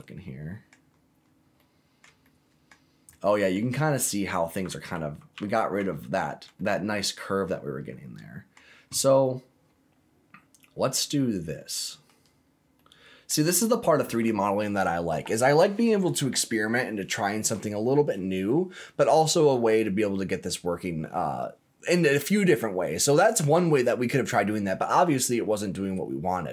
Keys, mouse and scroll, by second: 0.9-1.4 scroll up 4, 1.5 middle click, 2.2 shift+middle click, 3.1 shift+middle click, 4.0 middle click, 4.9 ctrl+z, 5.3 ctrl+z, 5.7 ctrl+z, 6.5-8.5 middle drag, 9.2-12.0 middle drag, 12.2-12.7 scroll up 2, 12.7 middle click, 26.4 scroll down 1.